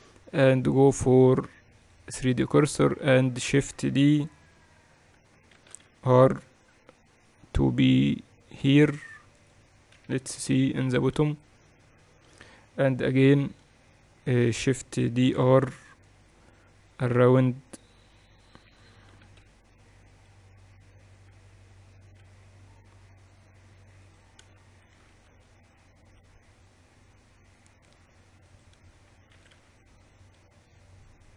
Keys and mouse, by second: 1.5-6.2 drag, 6.2 shift+d, 10.8 KP_2, 10.9 KP_2, 11.9 KP_2, 13.8 KP_7, 15.9 shift+d, 22.8 r, 25.6 shift+d, 30.0 shift+d.